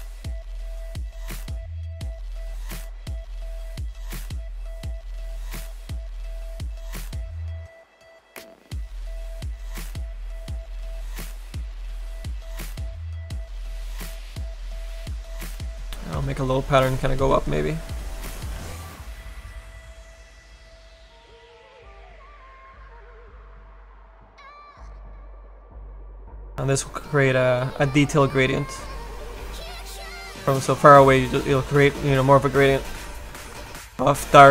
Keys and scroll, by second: 4.3 s, 5.3 s, 5.6 s, 6.1 s, 15.6 s, 17.2 s, 18.5 s, 18.9 s.